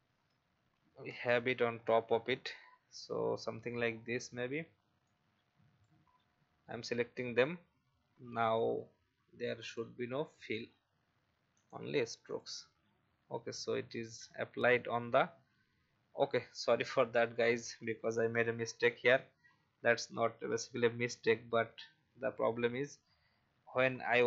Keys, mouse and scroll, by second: 0.8 ctrl+z, 1.7 alt+scroll up 1, 3.8 alt+scroll down 1, 5.0 click, 10.7-11.5 scroll up 1, 11.5 click, 13.4-13.8 alt+scroll up 1, 14.4 alt+scroll down 1, 16.8 ctrl+z, 17.4 ctrl+z, 17.9 ctrl+z, 18.1 ctrl+z, 19.1 ctrl+z, 21.5 ctrl+z, 22.7 alt+scroll down 1, 24.1-24.2 drag.